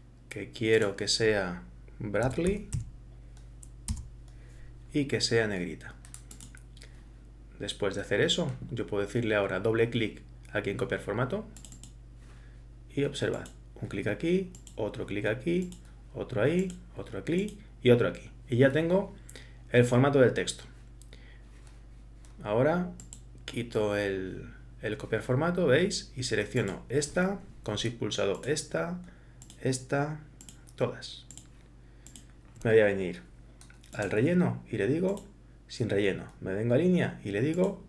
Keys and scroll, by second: 2.0-3.0 typing, 4.0 Return.